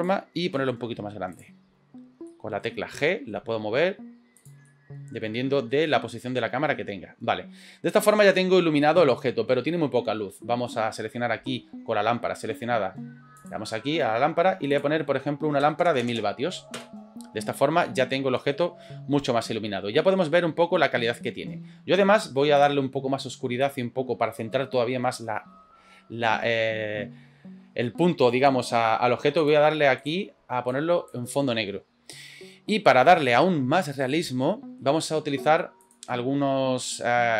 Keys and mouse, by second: 2.3 middle click, 2.3 s, 4.7-7.7 middle drag, 13.4 click, 14.7-17.4 drag, 17.9-18.6 middle drag, 20.0 middle click, 20.4-21.2 middle drag, 22.6 click, 23.6 click, 29.4 click, 30.0 drag, 33.9-34.8 shift+middle drag, 35.8 click.